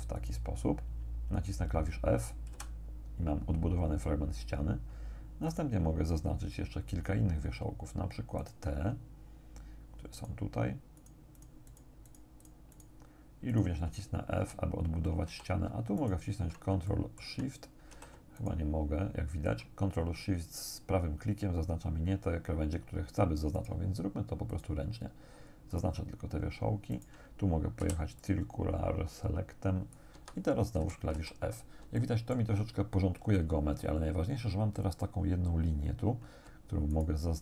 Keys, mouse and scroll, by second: 0.2 shift+right click, 2.6 f, 5.5 right click, 8.5 right click, 10.2 shift+right click, 11.0 shift+right click, 11.6 shift+right click, 12.1 shift+right click, 13.5 shift+right click, 14.5 f, 15.3 a, 16.0 alt+shift+right click, 16.9 alt+shift+middle click, 17.9 a, 18.4 alt+shift+right click, 23.6 shift+right click, 24.5 shift+right click, 25.7 shift+right click, 27.0 shift+right click, 27.9 c, 28.3-30.2 drag, 30.2 Escape, 31.2 a, 31.5-32.0 scroll down 1, 32.0 shift+click, 36.9 alt+shift+right click.